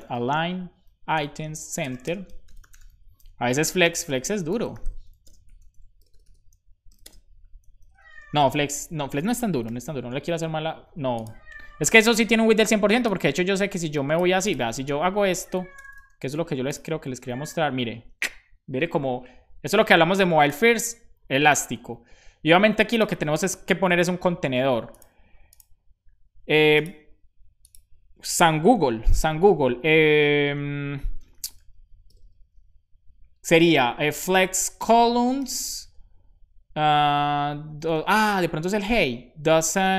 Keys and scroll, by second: 0.0-0.6 typing, 0.8 Down, 1.1 Return, 1.7-5.2 typing, 7.1-8.7 typing, 8.8 super+s, 10.0 super+s, 15.7 BackSpace, 16.0 super+s.